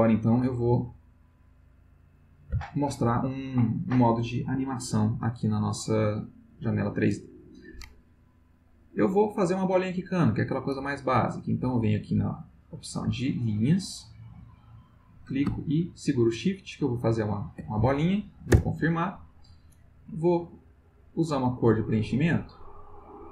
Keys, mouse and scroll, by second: 0.2 click, 2.2 click, 8.8 click, 11.7 click, 14.8-17.3 drag, 18.5 Return, 20.8 click, 22.4 click, 23.2 click.